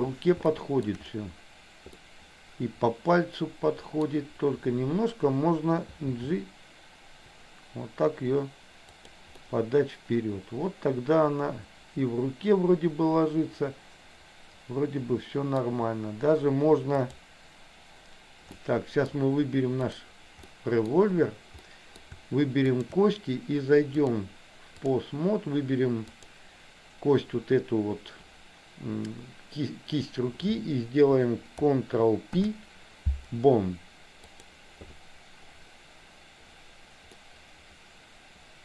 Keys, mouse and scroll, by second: 0.7 shift+middle click, 2.1-4.1 middle drag, 6.3 g, 9.5-15.8 middle drag, 18.7 middle click, 19.9 click, 20.6 middle click, 21.6 middle click, 22.9 shift+click, 24.0-25.0 drag, 26.3 click, 32.4 ctrl+p, 37.3-38.6 middle drag.